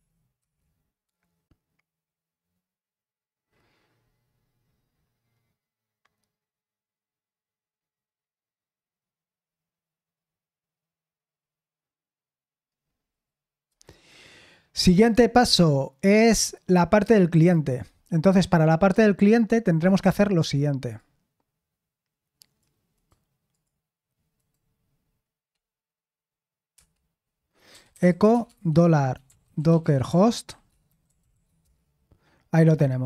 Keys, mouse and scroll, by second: 0.0-1.1 typing, 4.9-7.0 scroll down 2, 7.0-7.7 scroll down 1, 7.7-9.4 scroll down 1, 9.4-10.2 scroll down 1, 10.2-11.3 scroll down 1, 11.3-14.6 scroll down 1, 14.6-16.4 scroll down 1, 16.4 scroll down 1, 16.4-16.8 scroll up 1, 16.8-20.9 scroll down 3, 20.9-22.9 drag, 22.9 right click, 23.5 click, 24.3-26.7 right drag, 26.7 Return, 27.4-31.8 typing.